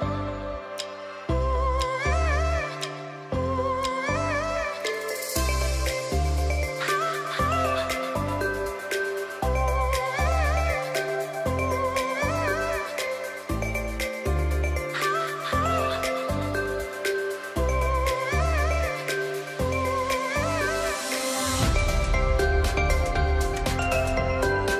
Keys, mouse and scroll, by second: 6.5 space, 6.6-10.5 drag, 11.7-12.1 alt+scroll down 1, 16.6 ctrl+Return, 18.6 shift+F6, 19.6 Return, 24.1 click.